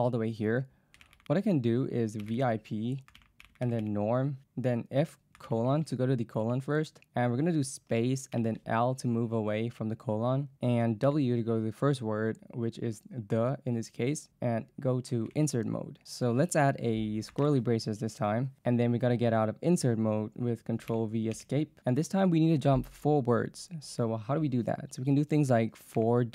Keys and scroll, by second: 0.0-5.5 typing, 7.9 space, 8.4 l, 11.1 w, 15.3 i, 17.4 shift+[, 20.9 ctrl+v, 21.4 Escape, 26.0 4.